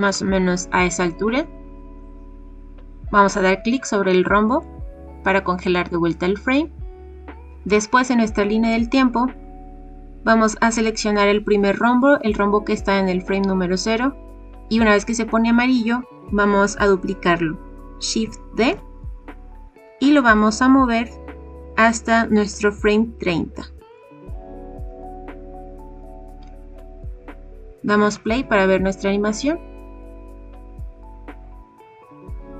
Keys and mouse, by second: 4.6 click, 9.3 click, 18.5 shift+d, 23.8 click, 28.1 click.